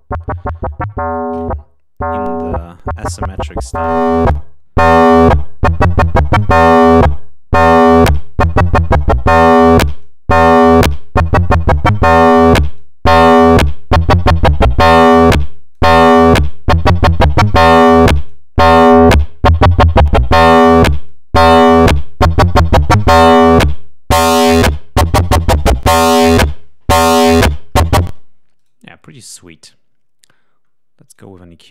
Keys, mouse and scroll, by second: 2.2 right click, 2.6 click, 3.3 right click, 3.6-5.4 drag, 6.0 click, 6.6-8.6 right drag, 6.8-8.6 drag, 8.9-10.2 drag, 10.6 click, 12.1 click, 14.1-15.9 drag, 16.0 right click, 16.4 right click, 16.9 click, 17.5 right click, 17.7 click, 18.7 click, 19.9 click, 21.0 click, 22.2 click, 23.4 click, 27.4 click, 28.2 space, 28.6 right click, 31.0 click.